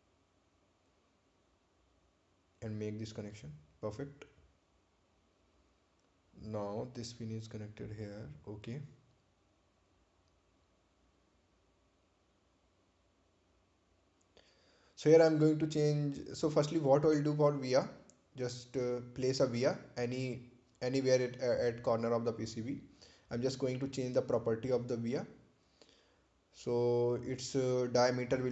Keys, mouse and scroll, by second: 5.1 click, 6.2 right click, 7.9 ctrl+click, 15.2 click, 17.5 right click, 18.4 click, 21.6 right click, 22.9 click, 25.5 click.